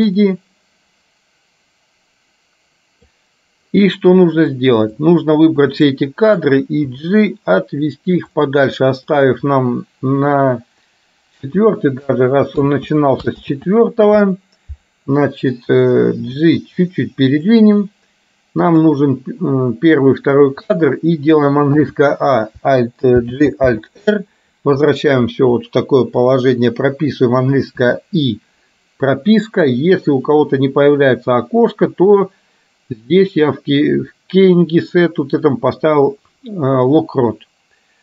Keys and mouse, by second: 5.1 click, 7.0 g, 9.3 click, 12.7 ctrl+z, 13.6 ctrl+z, 16.3 g, 18.8 click, 23.3 alt+g, 23.8 alt+r, 32.2-38.0 drag.